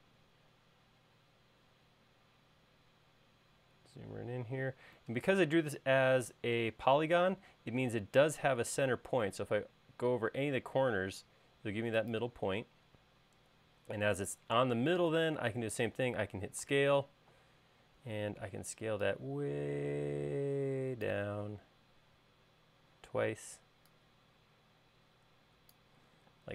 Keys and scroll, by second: 13.2 space, 17.2 s.